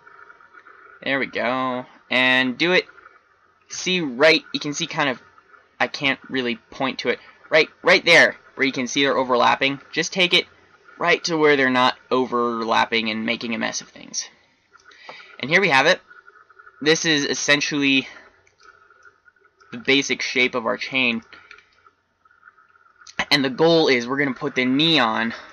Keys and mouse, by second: 12.3-14.4 middle drag, 15.3 Tab, 15.6-18.1 middle drag, 25.3 middle click.